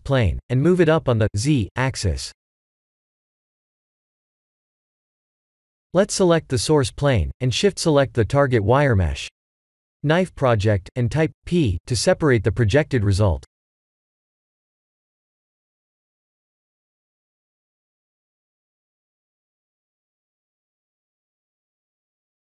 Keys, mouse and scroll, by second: 1.5 s, 3.2 middle click, 3.7 g, 5.6 KP_1, 5.8 KP_7, 7.2 shift+click, 8.2 Tab, 9.7 alt+a, 10.5 click, 16.9 middle click, 18.5 middle click, 20.0 g, 21.3 ctrl+z.